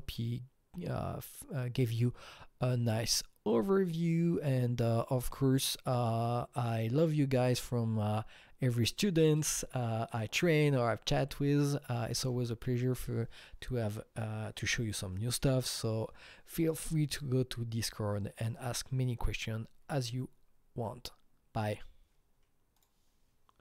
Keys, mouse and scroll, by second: 22.7 click.